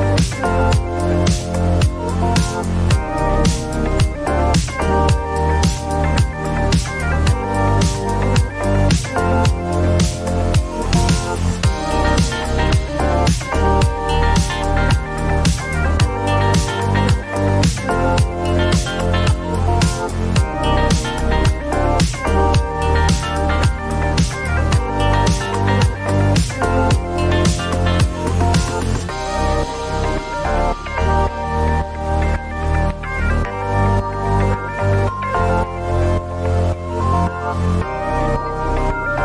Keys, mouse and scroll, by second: 0.2 click, 0.6-1.5 typing, 0.9 Return, 3.0 click, 4.8 click, 10.3 click, 11.6-12.0 typing, 12.9 Return, 15.3 click, 16.3 click, 22.0 click, 23.5 click, 26.1 click, 27.3 ctrl+d, 28.6 right click, 29.2 click, 30.4 Right, 31.0 BackSpace, 31.9 2, 33.2 Return, 35.0 Return, 35.6 click.